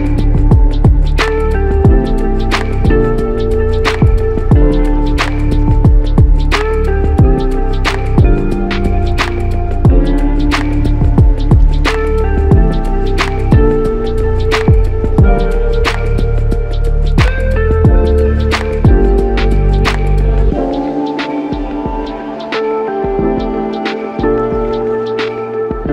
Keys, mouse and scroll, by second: 0.3 shift+click, 6.2 double click, 7.7 shift+click, 8.0 shift+double click, 10.7 ctrl+click, 13.4 ctrl+click, 13.7 ctrl+double click, 13.8 ctrl+double click.